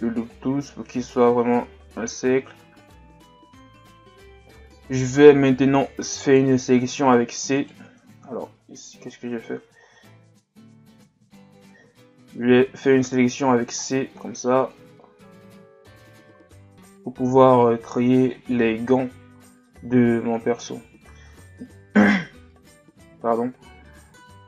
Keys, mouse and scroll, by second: 1.9-2.6 scroll down 2, 2.6-3.3 scroll up 2, 3.3 Tab, 6.2 right click, 6.8 v, 8.3 ctrl+z, 10.9 z.